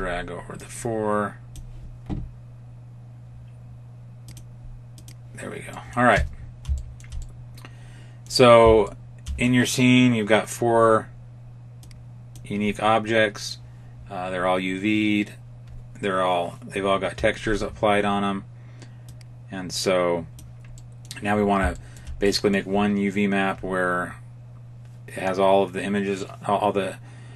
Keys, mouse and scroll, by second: 4.1 click, 5.6 middle click, 6.0 Tab, 6.3-6.6 scroll down 1, 6.6 shift+middle click, 7.1 middle click, 8.7 shift+middle click, 11.7 click, 18.9 click, 20.7 middle click, 21.3-21.7 scroll down 2, 21.7 shift+middle click, 22.1 middle click.